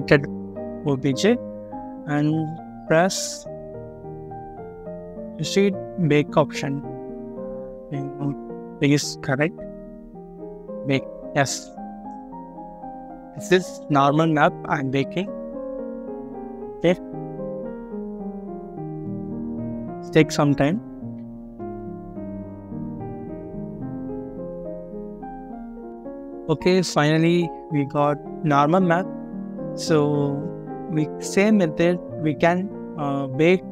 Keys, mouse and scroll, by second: 26.6-28.9 scroll up 1, 29.1-29.9 scroll down 1.